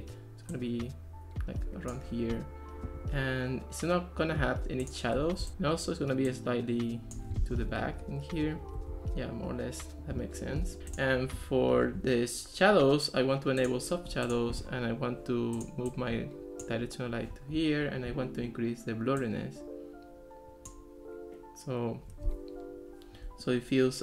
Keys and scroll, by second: 7.6 alt+r.